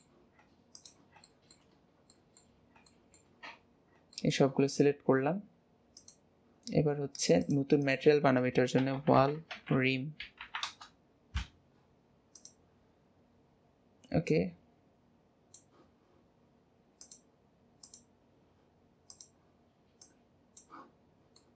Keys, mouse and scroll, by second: 0.7 shift+click, 1.3 shift+middle click, 1.7-2.1 scroll down 2, 2.1 middle click, 2.9 shift+middle click, 3.4-4.1 scroll up 2, 4.1-4.9 shift+middle drag, 4.9-5.5 scroll up 2, 5.9-9.1 drag, 12.3 click, 17.0-19.1 drag, 20.9-21.3 scroll down 2, 21.3-21.5 middle drag.